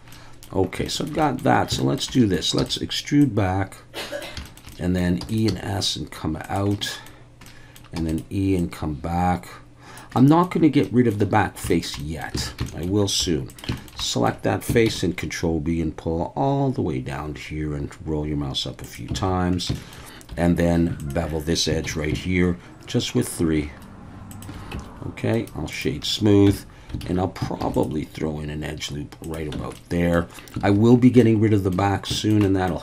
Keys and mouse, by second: 0.2 middle click, 0.9 shift+middle click, 1.3 middle click, 1.8 shift+middle click, 2.2 middle click, 2.6 e, 2.6-4.2 drag, 4.5 shift+middle click, 4.8 middle click, 5.2 e, 5.3 click, 5.5 s, 6.4 click, 6.8 middle click, 7.4 middle click, 8.0 e, 8.1 click, 8.6-10.0 drag, 10.2 middle click, 10.9 middle click, 12.1 middle click, 12.4 alt+a, 12.7 shift+middle click, 13.2 3, 13.5 click, 13.8 shift+middle click, 14.0 middle click, 14.9 ctrl+b, 18.8 click, 19.2 alt+a, 19.8 shift+middle click, 20.3 2, 21.0 alt+shift+drag, 21.8 ctrl+b, 24.3 shift+click, 24.7 Tab, 25.3 right click, 26.5 Tab, 27.0 alt+a, 27.6 ctrl+r, 29.2 click, 29.5 Tab, 29.7-30.1 middle drag, 30.6 alt+a, 31.2-31.7 middle drag, 32.2 shift+middle click, 32.4 middle drag.